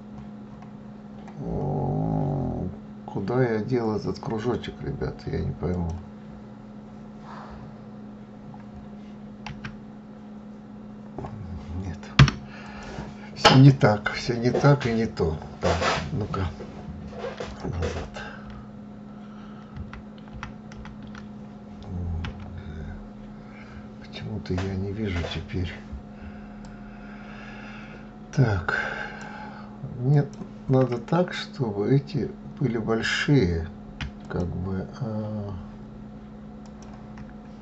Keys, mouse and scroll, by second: 5.7 scroll down 1, 7.0-7.9 scroll up 5, 7.9-8.7 scroll down 6, 8.9 s, 12.1 click, 12.7-14.0 scroll up 9, 17.5 ctrl+z, 17.9 ctrl+z, 19.3 ctrl+z, 19.7 ctrl+z, 20.2 ctrl+z, 21.7 g, 26.1-29.1 drag, 29.6 click, 33.7 shift+click, 36.1 shift+click.